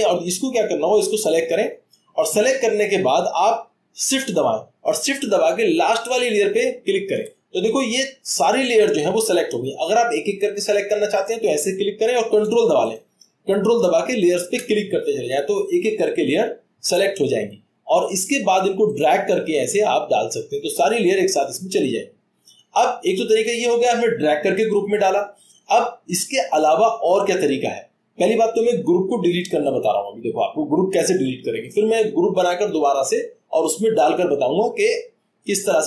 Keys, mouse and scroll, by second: 19.4-20.9 drag.